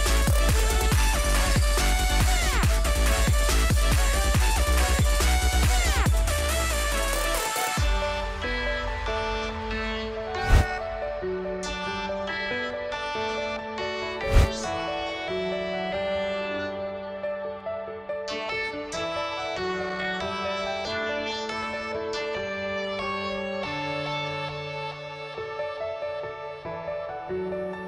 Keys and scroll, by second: 11.1 space, 13.9 space, 21.3-24.9 typing.